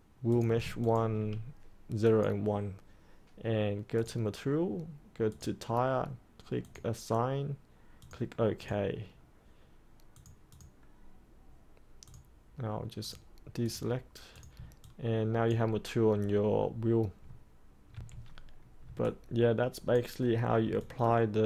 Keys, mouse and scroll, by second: 0.8 ctrl+click, 2.0-7.7 drag, 14.8 alt+click, 17.9 3, 18.0 click, 18.9 alt+click, 20.8-21.4 alt+drag.